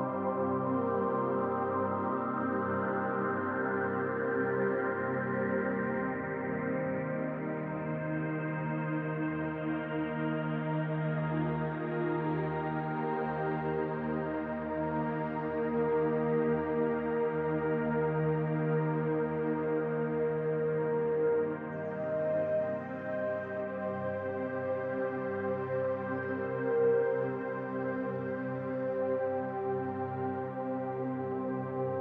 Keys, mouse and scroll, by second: 1.7-3.3 middle drag, 2.5 scroll up 1, 3.3-12.2 drag, 11.9 scroll down 1, 12.2-13.5 middle drag, 13.3 scroll up 2, 13.5-15.3 drag, 15.3 middle click, 15.8-17.5 drag, 17.3 scroll down 2, 17.5-19.0 middle drag, 17.8 scroll up 2, 18.3-18.7 scroll up 2, 19.0-22.2 drag, 22.2-27.7 middle drag, 22.6 scroll down 2, 23.3-23.6 scroll down 2, 25.2-25.8 scroll up 2, 27.4 scroll up 2, 27.7-30.5 drag, 30.4 scroll down 2, 30.5-31.7 middle drag, 30.9-31.3 scroll up 2, 31.7-32.0 drag.